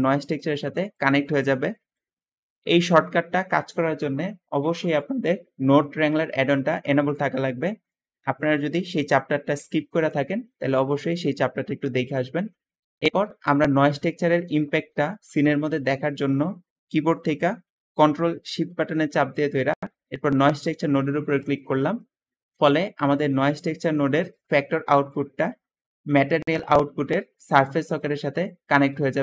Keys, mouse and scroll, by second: 12.8 Escape, 12.9 Escape, 15.5 middle click, 15.5-16.3 scroll down 2, 22.9 `, 26.3-27.4 drag, 27.8 click, 28.2 click.